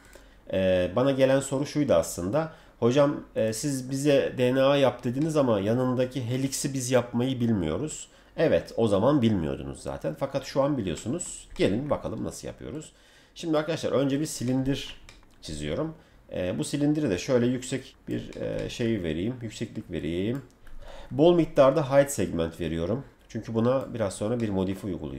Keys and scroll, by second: 20.9 F3.